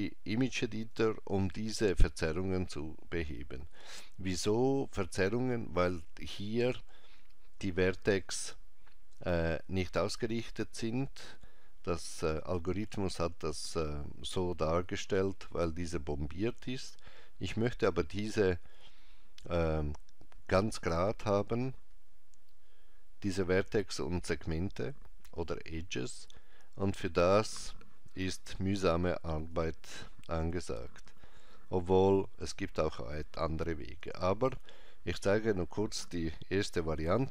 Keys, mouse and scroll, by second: 29.4 click, 37.0 ctrl+Tab.